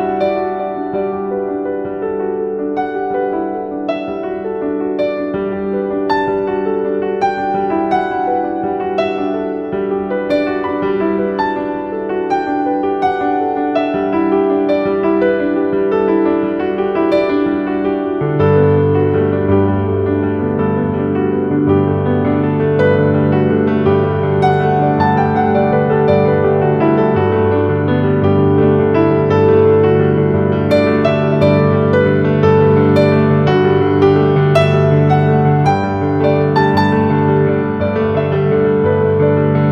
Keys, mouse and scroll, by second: 2.4-2.8 scroll down 1, 4.2-7.5 scroll down 1, 9.2 click, 9.6 scroll up 1, 9.9 z, 10.2 click, 10.4 z, 10.6 click, 10.7 z, 10.9 click, 11.1 space, 12.6 click, 13.3-16.6 shift+drag, 16.6-18.2 drag, 18.2-20.6 shift+drag, 20.6-26.6 shift+drag, 26.6 Down, 29.0 click, 29.4-32.6 typing, 29.7 click, 30.1 click, 31.6 click, 32.1 click, 32.4 click, 35.0 click, 35.7-37.2 shift+drag, 37.2 shift+click, 38.1 right click, 38.8 click.